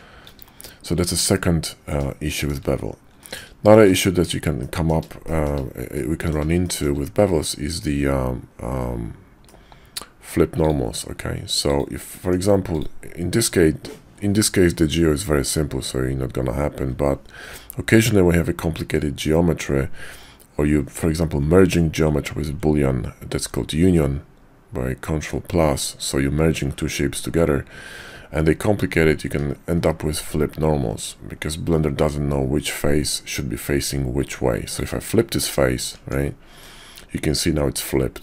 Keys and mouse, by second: 1.6-2.0 middle drag, 2.3 shift+middle drag, 3.2 middle drag, 3.7 shift+a, 4.6-4.9 middle drag, 5.2 shift+middle drag, 5.9-6.3 middle drag, 6.6 shift+middle drag, 9.4-10.3 middle drag, 10.6 click, 12.2 Tab, 29.7 alt+n, 36.0 Tab, 36.6-38.2 drag.